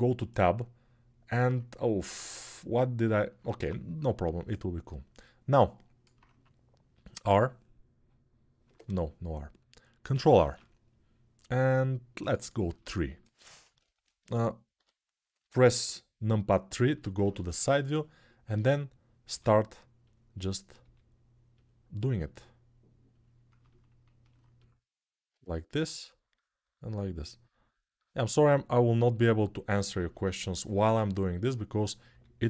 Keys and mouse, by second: 1.7 ctrl+Tab, 3.3 Tab, 6.9 r, 10.1 ctrl+r, 12.2-17.1 shift+middle drag, 14.5 KP_3, 17.1-19.9 drag, 19.0 g, 19.9 middle click, 20.1-21.4 drag, 20.6 g, 21.4 middle click, 21.9-23.0 drag, 23.0-24.3 middle drag, 24.3-25.7 drag, 25.7 middle click, 25.7 g, 26.1-27.4 drag, 26.3 g, 27.4 middle click, 27.9-29.0 drag, 29.0-30.8 middle drag, 30.8-32.4 drag, 31.8 g.